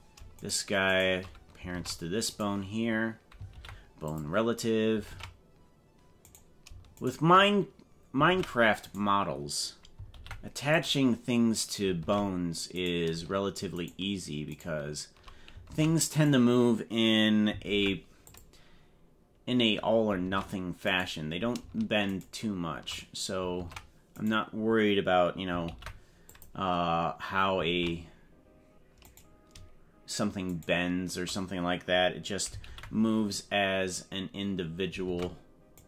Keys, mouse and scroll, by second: 0.4 shift+right click, 1.0 right click, 1.7 ctrl+Tab, 2.4 right click, 3.5 ctrl+p, 5.1 ctrl+Tab, 6.2 right click, 7.0 shift+right click, 8.2 ctrl+Tab, 8.9 right click, 10.1 ctrl+p, 12.0 ctrl+Tab, 12.8 right click, 13.7 shift+right click, 14.6 right click, 15.8 ctrl+Tab, 16.2 right click, 17.6 ctrl+p, 20.2 ctrl+Tab, 20.9 right click, 22.1 shift+right click, 23.7 ctrl+Tab, 24.3 right click, 25.6 ctrl+p, 27.7 ctrl+Tab, 29.1 right click, 30.7 shift+right click, 32.7 ctrl+p, 35.1 ctrl+Tab.